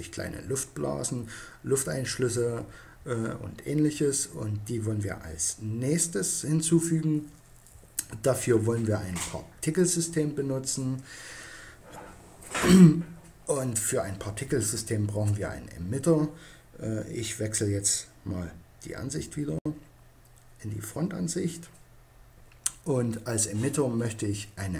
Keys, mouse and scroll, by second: 18.7 KP_1.